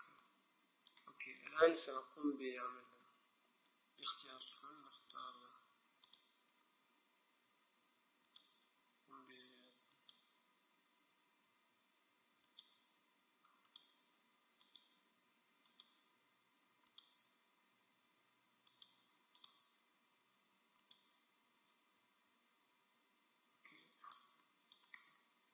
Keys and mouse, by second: 3.1 a, 3.7 a, 6.2-7.8 drag, 8.4-11.7 right drag, 12.6-18.6 right drag, 18.8-22.6 right drag.